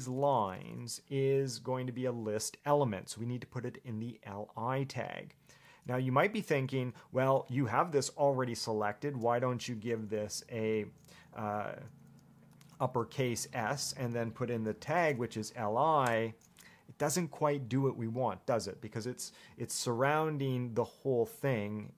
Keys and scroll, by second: 0.0-1.4 typing, 14.7-15.8 typing, 16.3 Return.